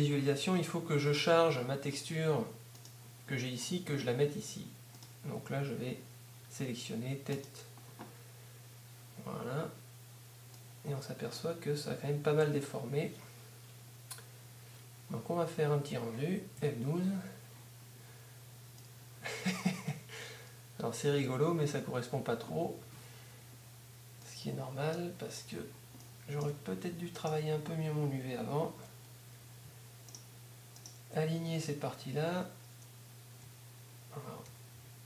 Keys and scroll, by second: 16.6 F12, 33.1 z, 34.5 y.